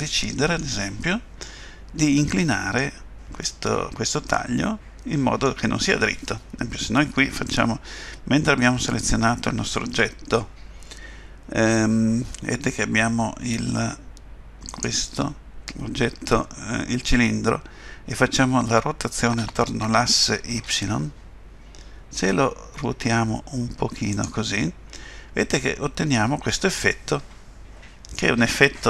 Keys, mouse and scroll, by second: 1.4 middle click, 3.0-3.6 scroll down 2, 3.4 middle click, 14.7 click, 19.4 r, 24.6 middle click.